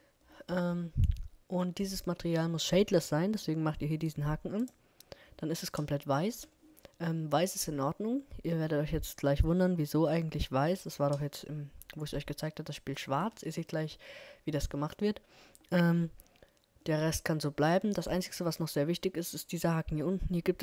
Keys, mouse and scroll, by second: 1.6-2.6 middle drag, 4.6-6.4 drag, 11.1 scroll up 1, 11.3-12.3 middle drag, 16.6-20.2 middle drag.